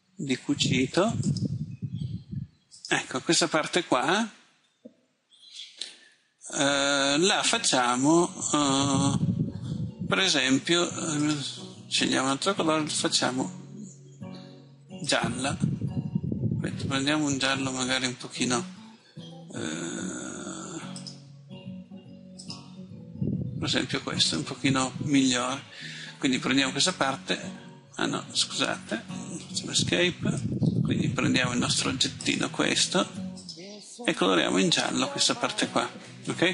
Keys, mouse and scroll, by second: 29.8 Escape, 32.3-36.5 drag.